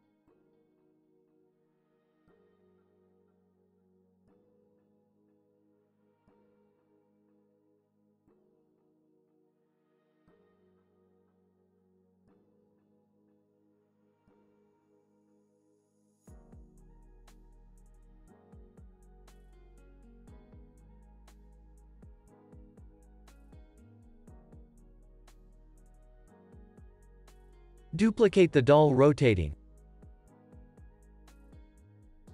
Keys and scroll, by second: 0.8 space, 3.9 space, 16.1 space, 18.5 space, 18.8 super+s, 20.5 z, 30.5 super+d, 32.2 [.